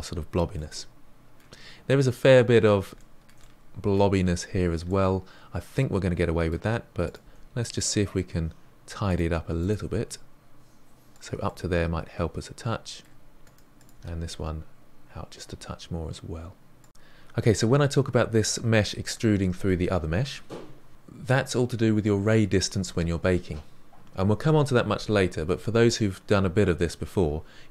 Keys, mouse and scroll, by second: 1.6-2.9 scroll up 3, 2.9-7.0 shift+middle drag, 7.0 click, 7.2 g, 9.5 click, 9.7 g, 10.8-12.1 middle drag, 12.1 g, 12.5 g, 12.8 click, 12.9 g, 14.2 middle click, 14.6 click, 14.6 g, 16.0 middle click, 16.8 scroll down 1, 16.9-18.7 middle drag.